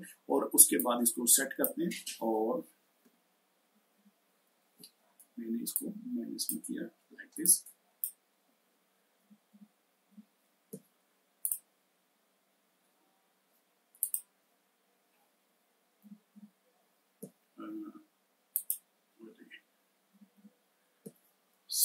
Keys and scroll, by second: 3.4 ctrl+-, 3.7 ctrl+-, 9.0 ctrl+-, 9.3 ctrl+-, 9.9 ctrl+-, 15.8 ctrl+-, 16.1 ctrl+-, 19.9 ctrl+-, 20.1 ctrl+-.